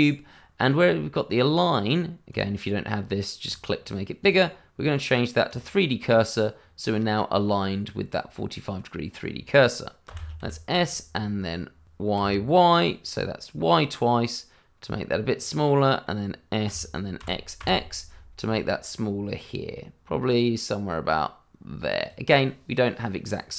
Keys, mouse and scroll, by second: 0.0-2.0 scroll down 1, 2.3 click, 6.1 middle click, 10.0 s, 10.4 y, 12.1 y, 15.3 click, 15.7 middle click, 16.6 s, 17.2 x, 22.0 click, 22.4 middle click.